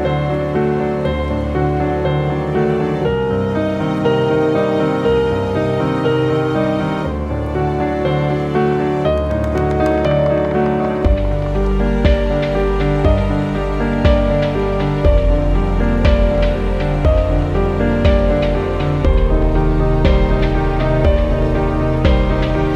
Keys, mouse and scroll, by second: 0.0 ctrl+d, 1.3 click, 7.1-15.0 drag, 17.7 right click, 18.7 click.